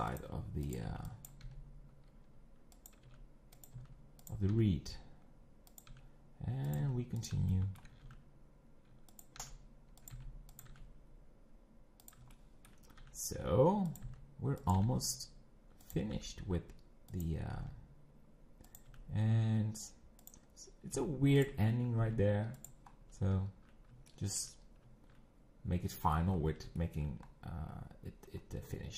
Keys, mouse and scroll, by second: 0.7 click, 1.3 b, 1.4 g, 3.1 e, 3.8 s, 4.7 e, 5.9 e, 6.8 s, 7.5 shift+middle click, 8.0 e, 9.4 e, 10.1 5, 10.7 e, 12.3 shift+middle click, 13.0 e, 14.0 s, 14.7 e, 15.8 e, 16.1 e, 17.6 g, 18.9 e, 21.0 s, 22.9-23.3 scroll down 5, 24.1-26.3 shift+middle drag, 26.3-26.8 scroll up 5, 26.8 shift+middle click, 27.2-27.8 scroll up 2.